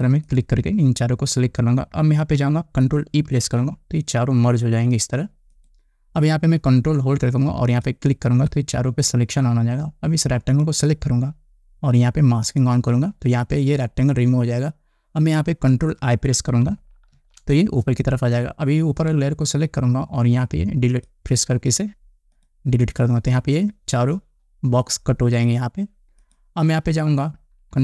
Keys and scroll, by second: 4.0 ctrl+e, 17.8 ctrl+i.